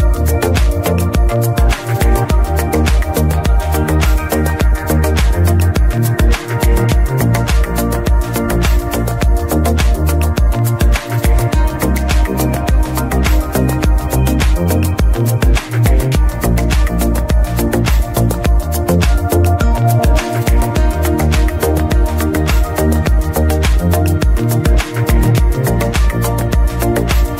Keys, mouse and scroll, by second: 0.3 scroll down 2, 0.5-2.2 middle drag, 2.2-3.5 scroll up 2, 3.5-5.8 scroll up 1, 5.8-8.2 scroll up 1, 8.2 m, 10.6-12.3 shift+middle drag, 12.3 ctrl+shift+click, 12.7-13.8 scroll down 2, 13.8-14.4 scroll down 1, 14.4 scroll down 1, 14.6-16.2 scroll up 2, 16.2-24.0 drag, 26.3 middle click, 26.3 ctrl+shift+click, 27.2 ctrl+shift+click.